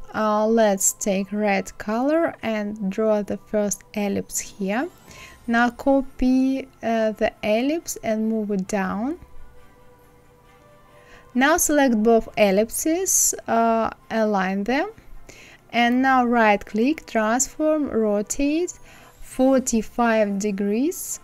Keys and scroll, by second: 19.5 KP_4, 19.8 KP_5.